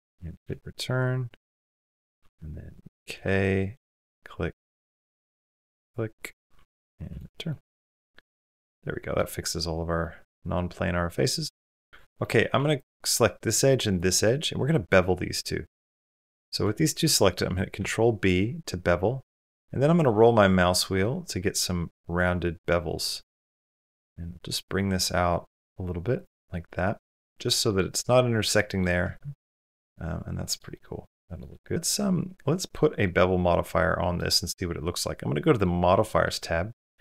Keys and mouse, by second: 0.6-1.6 middle drag, 2.9 k, 7.3-9.0 middle drag, 9.1 middle click, 10.1-11.6 middle drag, 11.8 Tab, 11.9 Tab, 11.9 shift+middle click, 12.6 2, 12.9 middle click, 14.1-15.6 middle drag, 15.9 middle click, 16.6 shift+click, 17.6 ctrl+b, 26.3 middle click, 27.3 middle click, 28.4 middle click, 28.8 Tab, 29.2-30.4 middle drag, 30.6-30.9 middle drag, 31.1 shift+middle click, 31.3-32.6 middle drag, 32.9-33.9 middle drag, 35.9 middle click.